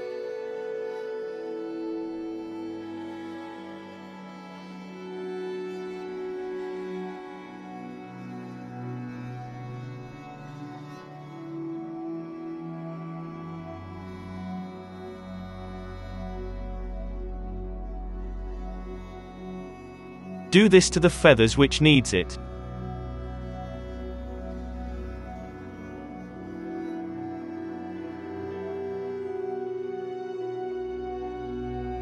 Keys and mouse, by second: 0.1 KP_7, 0.5 z, 1.1 Tab, 1.8-3.3 drag, 2.0 z, 2.5 g, 4.3-8.9 drag, 4.6 KP_Divide, 5.0-7.4 typing, 10.4 Tab, 10.6 r, 11.6 Tab, 12.1-15.1 drag, 12.4 shift+s, 13.6 shift+s, 13.7 Tab, 15.3 z, 15.7 KP_Divide, 17.4 KP_3, 17.8 s, 18.5 middle click, 18.9-21.2 drag, 19.1 Tab, 20.0-27.8 typing, 21.3 Tab, 21.5 Tab, 21.7 click, 21.9 Tab, 22.6 click, 24.1 click, 24.8 alt+a, 25.1-26.5 drag, 25.4 Tab, 26.1 Tab, 26.8 Tab, 27.1 click, 27.8 middle click, 28.3 click, 29.2 Tab, 29.5-32.0 typing, 29.7 Tab, 30.0 Tab, 30.1 Tab, 30.2 click, 30.4 Tab, 31.4 ctrl+2, 31.6 middle click, 31.6 click, 31.9 ctrl+2.